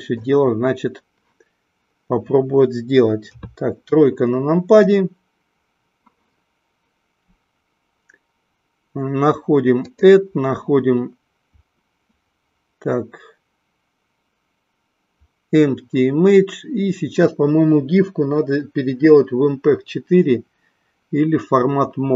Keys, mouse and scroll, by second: 3.2 KP_1, 9.8-17.2 drag.